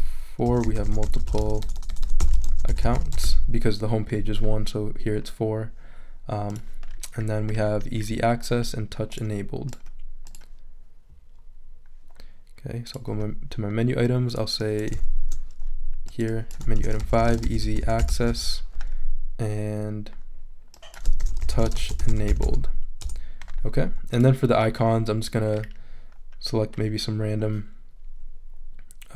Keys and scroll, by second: 0.2-3.7 typing, 16.5-18.1 typing, 21.0-22.9 typing, 23.0 Return.